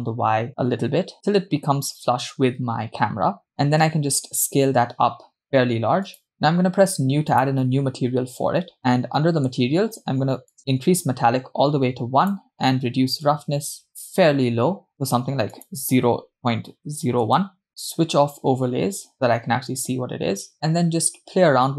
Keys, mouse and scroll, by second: 4.2 s, 7.3-8.7 drag, 8.8 scroll down 2, 9.1-10.2 middle drag, 10.6-12.8 drag, 13.7-14.9 drag, 14.9-15.5 scroll up 2, 15.5-17.7 drag, 16.5 0, 18.5 click, 20.5 g.